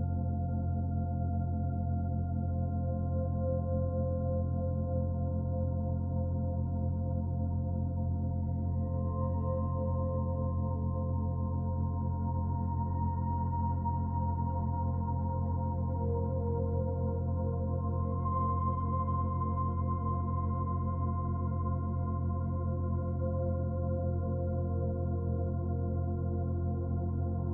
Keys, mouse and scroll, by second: 2.0 click, 3.9 shift+s, 6.9 shift+a, 10.1 KP_1, 11.1-12.5 scroll up 5, 12.5 Tab, 14.0 click, 16.7 click, 21.5 middle click, 23.9 s.